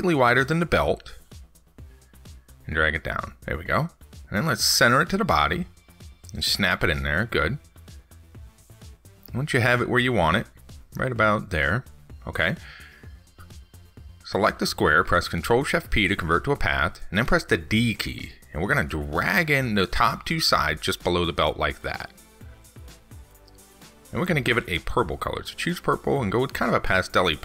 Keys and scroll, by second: 16.3 ctrl+shift+p.